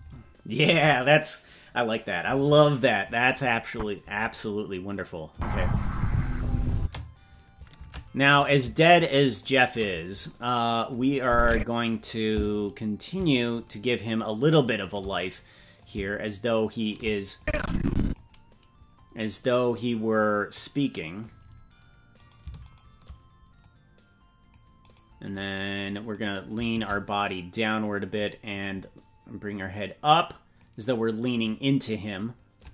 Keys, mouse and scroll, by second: 3.7 click, 5.3 space, 6.7 space, 7.8 ctrl+Tab, 8.4 right click, 9.0 shift+right click, 10.2 shift+right click, 11.2 click, 13.1-15.3 drag, 15.7-16.9 drag, 17.3 click, 19.0-20.5 scroll down 3, 20.5 click, 22.2 right click, 22.7 shift+right click, 23.6 click, 24.9 right click, 26.1-27.2 right drag, 27.2 click, 28.5 right click, 29.4-30.6 drag, 31.3 right click, 32.1 click.